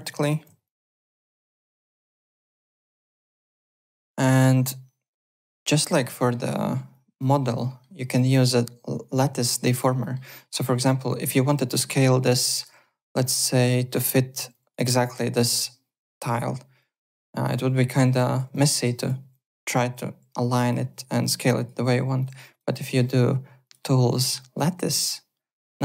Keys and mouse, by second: 0.1 click, 0.6 alt+click, 0.9 alt+middle click, 1.1 alt+right click, 2.2 click, 3.4 click, 3.8 alt+Tab, 4.1 alt+middle click, 5.8 click, 6.1 alt+middle click, 6.9 click, 7.4 alt+right click, 7.6 alt+middle click, 8.1 click, 10.0 alt+middle click, 10.7 r, 11.7 middle click, 12.2 click, 14.4 w, 14.5 click, 16.8 click, 17.4-20.6 typing, 17.5 click, 18.1 click, 18.5 click, 19.3 click, 19.7 click, 20.3 click, 21.2 click, 21.8 w, 22.2 click, 22.8 alt+middle click, 23.6 click, 24.8 click.